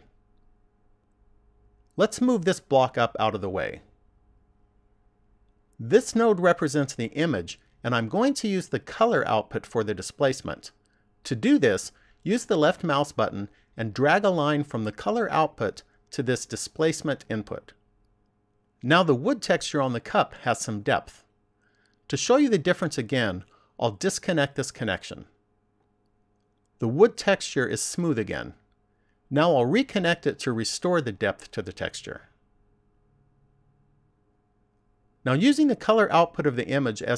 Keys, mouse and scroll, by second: 14.5 click, 25.6 click, 33.0 click.